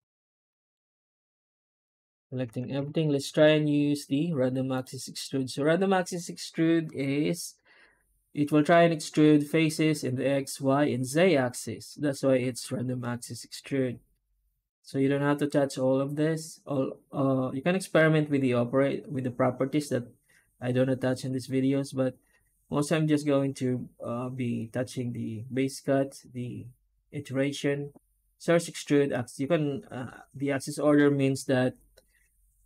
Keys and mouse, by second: 1.8 Tab.